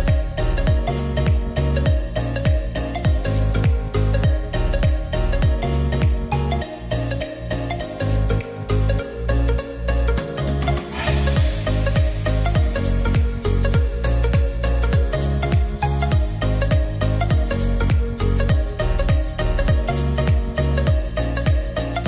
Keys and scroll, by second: 8.6-9.6 typing.